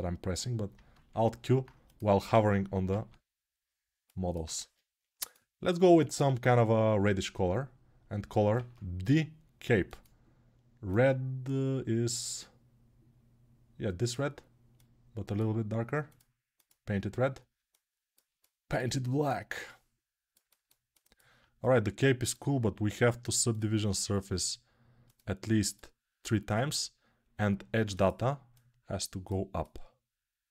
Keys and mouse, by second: 0.0-2.0 drag, 2.0-6.0 alt+right drag, 4.6 ctrl+Tab, 6.0-17.3 ctrl+middle drag, 6.2 ctrl+Tab, 8.3 ctrl+Tab, 17.3-30.5 alt+drag.